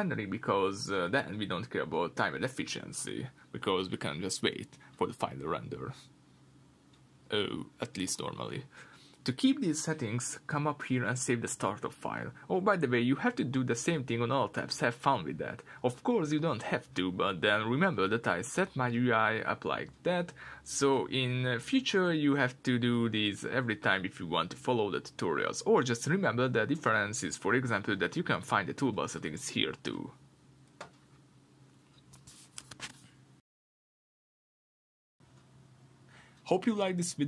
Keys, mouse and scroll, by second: 7.1 click, 14.6-17.0 drag, 18.2-35.5 middle drag, 32.9-35.5 scroll down 2.